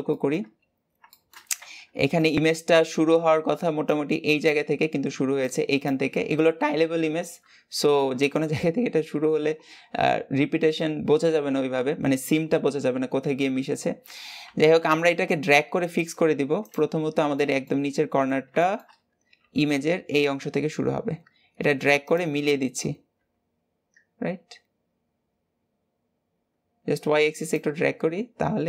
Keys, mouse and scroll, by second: 0.9-7.5 shift+middle drag, 7.5-8.4 scroll down 1, 8.4-9.4 scroll down 1, 9.4-10.4 scroll down 1, 10.4-11.5 scroll down 1, 14.3 g, 23.1 g, 28.1-28.6 scroll down 2.